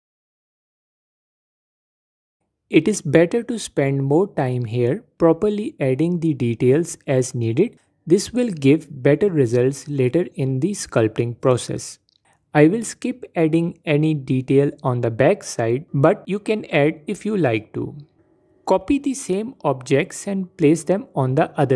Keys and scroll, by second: 4.3 shift+d, 12.1 shift+d, 20.4 shift+d.